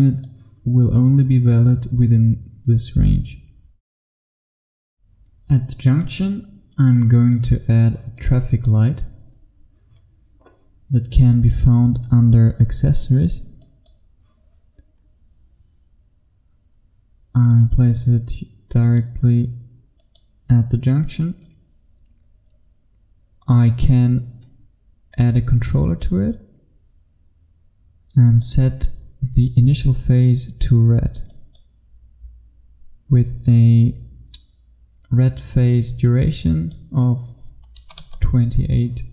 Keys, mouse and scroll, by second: 6.2-7.4 scroll down 1, 7.4 click, 9.3-13.7 scroll up 1, 13.7 click, 15.0-18.9 scroll up 1, 18.9 click, 37.8 KP_2, 38.1 KP_8.